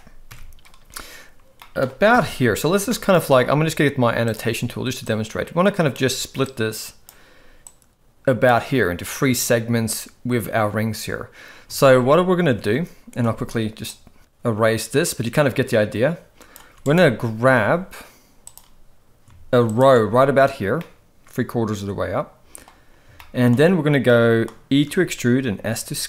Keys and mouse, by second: 1.6 middle click, 2.1 KP_1, 2.9 shift+middle click, 4.3 click, 5.1 click, 6.5 click, 7.7 click, 11.9 ctrl+z, 14.2-16.7 ctrl+drag, 16.8 right click, 18.5 click, 19.7 alt+shift+click, 20.8-22.7 middle drag, 23.2 shift+middle click, 24.1 middle click, 24.9 e.